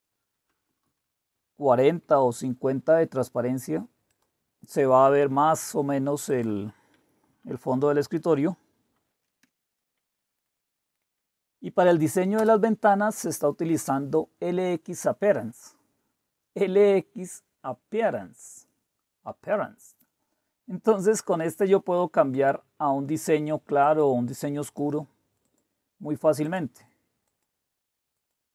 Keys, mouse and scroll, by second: 0.7 BackSpace, 0.8 BackSpace, 1.3 Delete, 1.9 typing, 4.1 click, 6.3 click, 7.3 Left, 7.5 Left, 7.6 Left, 8.4 Delete, 9.4-11.4 typing, 10.4-11.4 drag, 11.4 Tab, 12.4 Return, 22.3 click, 23.8 click, 24.6 click, 25.4 click, 26.4 click, 27.2 click, 28.1 click.